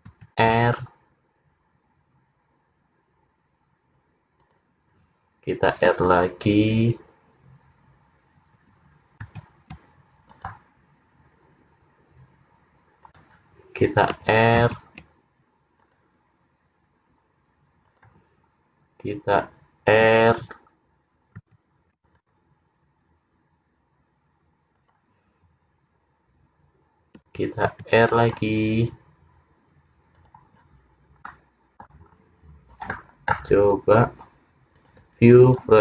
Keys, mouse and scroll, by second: 0.2 ctrl+r, 9.3 ctrl+r, 14.7 ctrl+r, 21.5 ctrl+r, 26.3-26.7 scroll down 1, 27.8 ctrl+r, 31.3 middle click, 32.1-32.6 scroll down 3, 33.8 scroll down 1, 34.8 click.